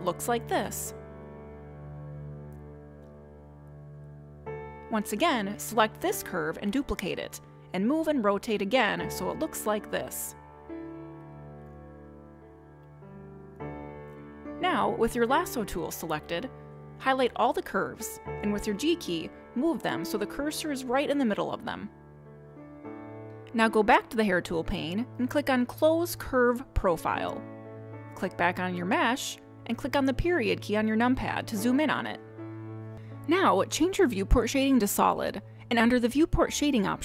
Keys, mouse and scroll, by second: 0.2 r, 1.7 click, 2.8 r, 5.2 g, 7.8 shift+d, 9.3 r, 11.3 g, 13.1 r, 15.3 click, 20.4 g, 27.8 click, 29.6 click, 30.9 KP_Decimal, 31.8 middle click, 36.1 click.